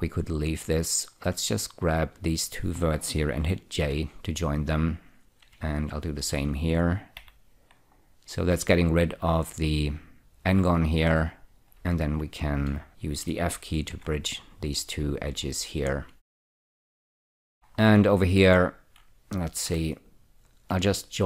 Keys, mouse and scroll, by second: 0.5 click, 2.2 shift+click, 4.2 j, 5.2 click, 6.2 shift+click, 7.5 j, 8.3-9.8 scroll up 1, 9.8 click, 11.0 click, 11.6-12.1 scroll down 2, 12.1 2, 12.6 click, 13.2 shift+click, 13.6 click, 14.2 f, 14.9-15.7 scroll down 3, 15.9 scroll down 1, 16.7 shift+middle click, 17.1 middle click, 17.3-19.8 scroll up 5, 20.0 1, 20.8 click.